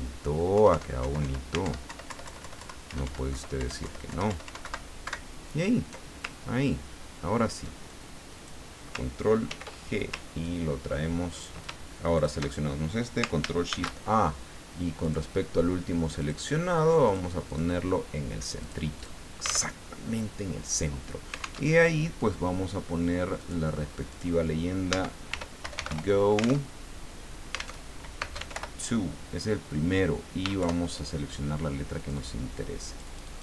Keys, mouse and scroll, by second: 0.5 Up, 1.0 Down, 1.7 alt+Up, 2.1 alt+Left, 2.8 alt+Up, 3.3 alt+Left, 3.6 alt+Up, 3.8 alt+Left, 4.3 alt+Up, 4.6 alt+Right, 6.7-7.1 ctrl+scroll down 2, 7.9 ctrl+click, 9.5 ctrl+g, 10.4-11.5 ctrl+drag, 12.1 shift+click, 13.7 ctrl+shift+a, 15.0 click, 16.2 click, 17.1 click, 17.5 click, 18.6 click, 19.7 alt+Tab, 21.6 alt+Tab, 23.4 click, 24.1 click, 25.4 t, 25.7 BackSpace, 25.9 o, 27.0 alt+Tab, 27.8 alt+Tab, 28.2 alt+space, 28.5 o, 30.6 shift+Home, 32.0 click, 32.8-33.4 drag.